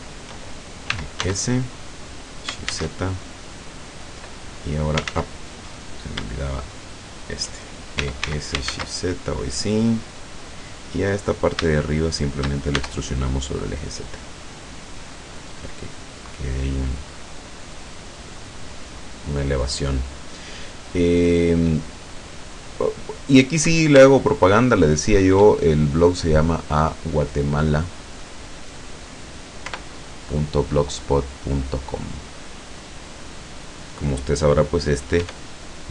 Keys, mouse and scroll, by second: 0.9 e, 1.2 s, 2.7 shift+z, 4.1 click, 5.2 ctrl+z, 5.5 ctrl+click, 5.9 right click, 7.2 shift+right click, 8.2 e, 8.3 s, 8.8 shift+z, 10.7 click, 11.2 middle click, 11.3 right click, 11.7 shift+right click, 12.2 shift+right click, 12.8 shift+e, 14.9 click, 15.4 scroll down 1, 15.7 right click, 15.8-17.1 middle drag, 17.2-18.9 middle drag, 19.5 scroll up 2, 24.3-25.3 shift+middle drag, 25.7-26.7 shift+middle drag, 28.3 right click, 29.7 i, 32.5 click, 33.0 right click, 35.3 e.